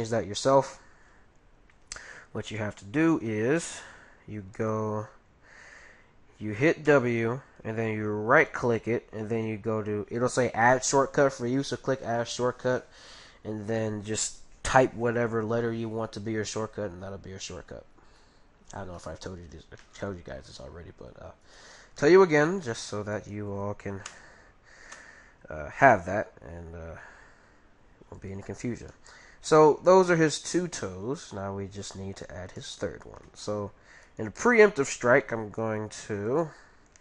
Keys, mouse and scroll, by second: 2.3 g, 6.9 w, 18.2-21.6 middle drag, 21.4-24.8 right drag, 22.0-23.7 middle drag, 24.1 s, 28.5-31.7 middle drag, 32.1-36.1 middle drag, 34.0-35.8 right drag, 35.5 g.